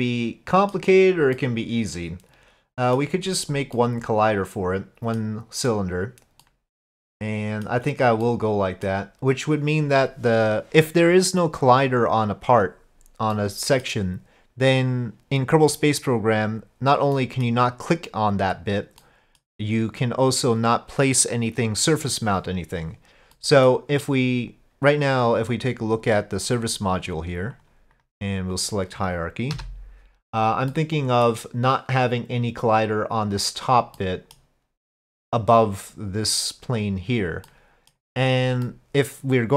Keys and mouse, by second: 1.4-3.0 middle drag, 3.8-5.2 middle drag, 6.4-7.7 middle drag, 8.3-8.9 middle drag, 13.4-13.9 middle drag, 17.2 middle click, 19.0-19.4 middle drag, 23.4-23.7 middle drag, 27.6 click, 27.9 click, 29.6 KP_Divide, 30.7-31.3 middle drag, 34.0-34.4 middle drag, 37.5-37.9 middle drag, 38.7-39.5 middle drag.